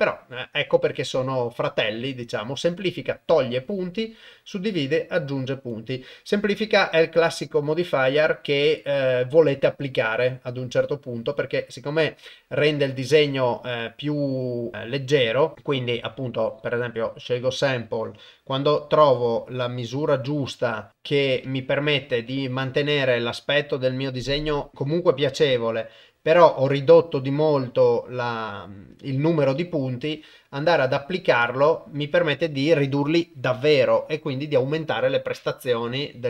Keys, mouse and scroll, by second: 13.2-13.9 drag, 15.1 click, 15.8-16.8 drag, 18.1-20.2 shift+drag, 20.9-22.0 drag, 22.6-24.0 shift+drag, 24.7-28.8 shift+drag, 30.8-31.5 drag.